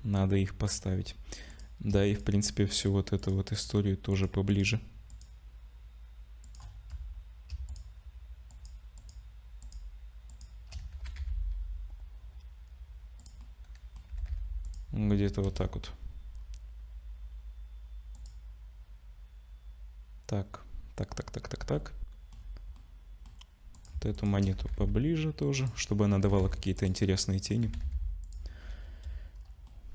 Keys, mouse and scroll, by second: 1.0 scroll up 2, 1.5 click, 2.0 shift+click, 2.7 shift+click, 3.5 click, 4.1 click, 4.5 shift+click, 5.1 shift+click, 6.4 shift+click, 7.1 scroll up 2, 7.7 shift+click, 8.5 shift+click, 9.6 shift+click, 10.3 shift+click, 10.9 g, 13.4 middle click, 14.1 g, 15.4 KP_0, 16.3-17.1 scroll up 2, 17.1-18.1 scroll up 1, 18.1 click, 21.7 middle click, 22.3-23.0 scroll down 3, 22.8 middle click, 23.7 click, 24.1 shift+click, 24.6 g, 26.2 middle click, 26.2 g, 27.0 middle click, 27.6 g, 28.8 KP_0, 29.7 middle click.